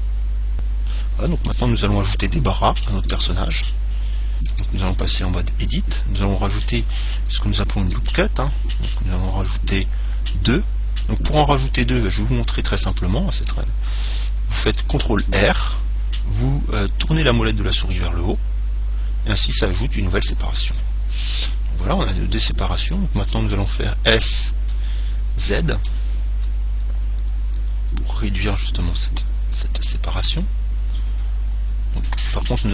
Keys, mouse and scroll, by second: 2.5 ctrl+Tab, 3.4 ctrl+Tab, 4.7 Tab, 5.2-8.0 middle drag, 8.0 ctrl+r, 12.1-16.4 middle drag, 15.5 ctrl+r, 21.0 click, 25.8 s.